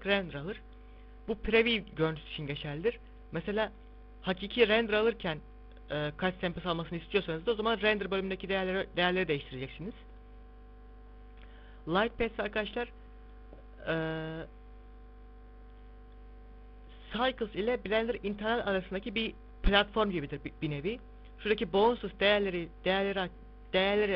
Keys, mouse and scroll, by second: 0.7 z, 3.5 click, 10.1 click, 12.9 middle click, 14.1 z, 14.5 scroll up 1, 23.3 click.